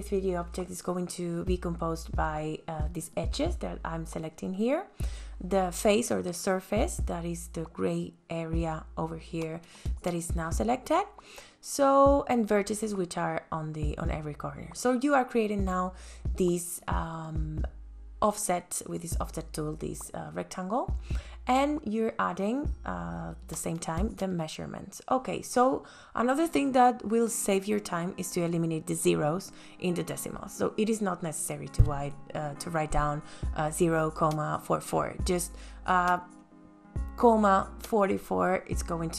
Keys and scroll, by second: 10.6 f, 21.7 ,, 23.4 KP_4, 23.6 KP_4, 25.6 KP_Enter, 34.0 space.